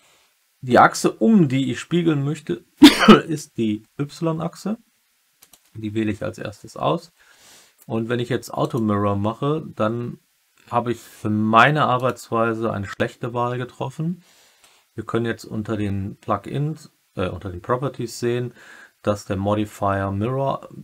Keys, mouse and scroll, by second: 5.3 click, 8.6 click, 12.0 click.